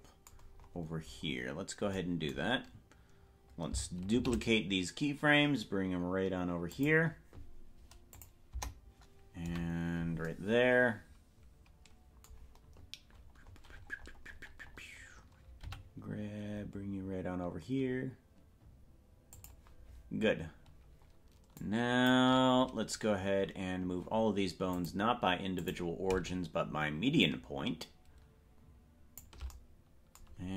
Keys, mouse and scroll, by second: 0.6-1.6 scroll up 11, 4.2 shift+d, 8.2 click, 8.6 KP_0, 9.4 KP_Decimal, 13.2-15.0 scroll up 31, 15.6 g, 20.4-21.0 scroll down 4, 21.7 click, 24.7-25.8 drag, 27.2-29.3 shift+drag.